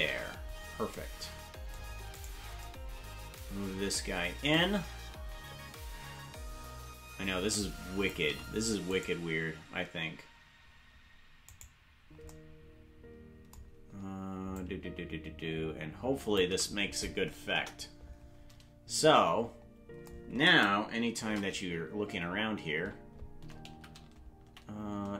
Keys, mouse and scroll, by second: 2.2 right click, 4.5-8.1 drag, 9.0 right click, 11.5 right click, 14.5-16.4 shift+drag, 17.5 KP_0, 24.5 shift+`.